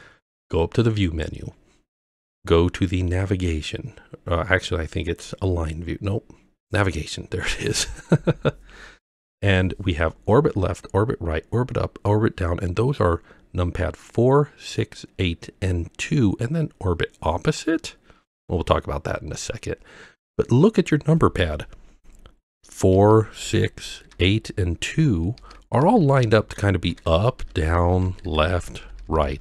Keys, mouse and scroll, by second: 1.0-20.4 drag, 23.0-29.4 typing.